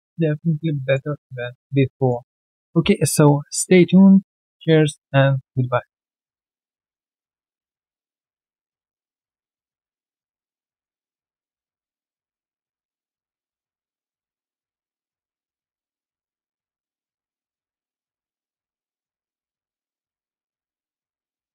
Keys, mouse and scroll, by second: 0.7 alt+middle click, 0.9-1.3 alt+scroll down 1, 1.3 alt+click, 1.6 alt+right click, 1.9 alt+click.